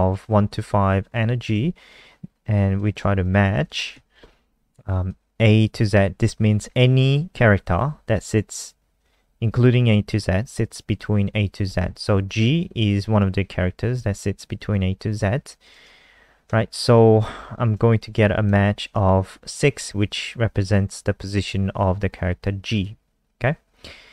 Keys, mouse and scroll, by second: 3.3 Right, 3.7 ;, 3.8 Left, 5.1 click, 16.1 Left, 16.2 Left, 16.4 Left, 17.8 End, 18.1 ctrl+s, 18.4 F5, 22.7 click.